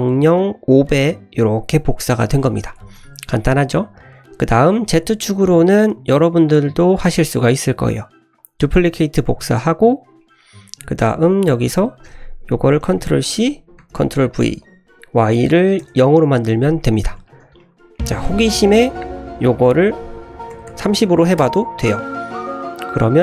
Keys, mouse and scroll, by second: 2.7 shift+middle drag, 2.9 scroll down 1, 3.1-3.9 middle drag, 4.0 scroll down 1, 4.1 scroll up 1, 4.5-5.8 scroll down 2, 5.8 click, 6.9-8.7 drag, 9.5 click, 10.0-10.8 scroll down 2, 10.2 middle click, 12.0-13.4 drag, 13.5-14.5 drag, 14.6-16.0 drag, 16.9 scroll down 2, 17.2 shift+middle click, 17.6 middle click, 17.7-18.2 scroll up 4, 18.2 shift+middle drag, 18.4 scroll down 1, 18.5 middle click, 18.9-19.3 scroll down 1, 19.6-23.2 drag, 19.6 scroll down 1.